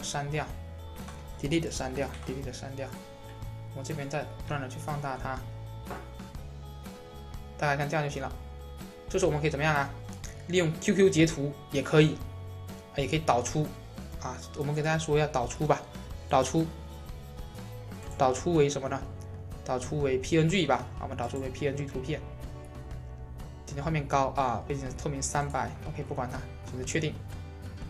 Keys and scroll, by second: 0.9 Delete.